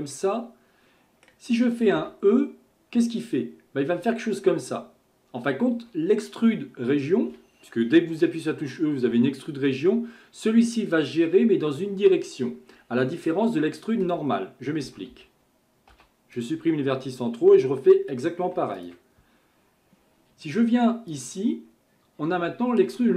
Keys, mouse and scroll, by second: 0.1-2.0 middle drag, 2.0 e, 15.9 m, 18.8 alt+click, 21.1-23.1 drag.